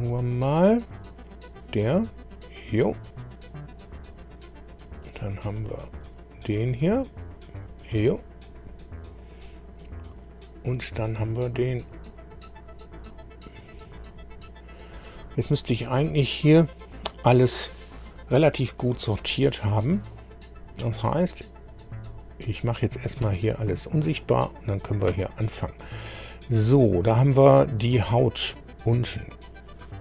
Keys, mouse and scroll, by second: 0.9 click, 2.3 click, 6.0 click, 7.3 click, 8.5-9.2 scroll down 4, 10.1 click, 13.0 click, 14.4 scroll down 1, 15.8 click, 21.2 shift+click, 23.2 space, 24.0 click, 25.1 space, 26.1 scroll up 2, 26.5-28.6 middle drag, 29.4 click.